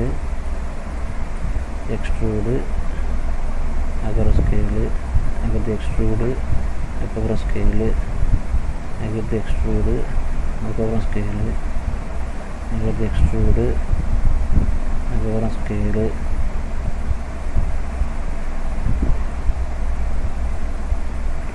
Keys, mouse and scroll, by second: 0.1 middle click, 1.0 middle click, 1.7 e, 3.9 s, 5.5 e, 6.7 s, 8.8 e, 10.5 s, 12.8 e, 15.7 s, 18.5 shift+middle click, 20.0 s.